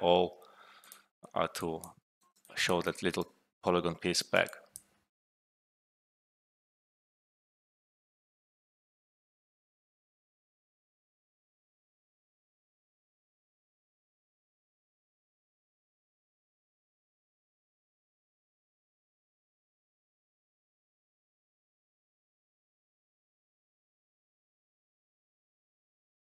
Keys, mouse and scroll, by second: 1.6 alt+click, 2.1 alt+right click, 2.4 alt+click, 2.8-3.4 alt+right click, 3.8 alt+middle click, 4.2 alt+right click, 4.4 alt+click.